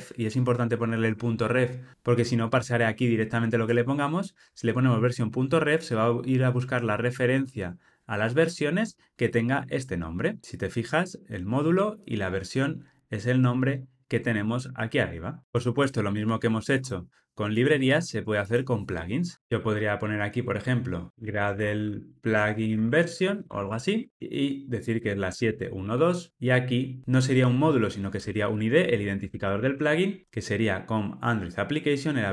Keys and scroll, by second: 10.4 Tab.